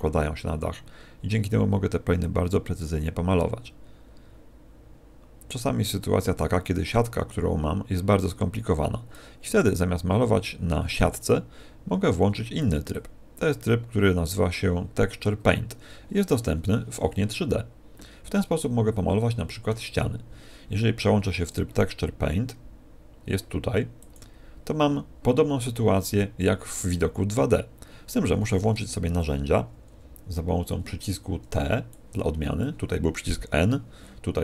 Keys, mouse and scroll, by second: 9.6 click, 12.9 click, 18.6 middle click, 21.4 click, 29.8 t, 31.8 click.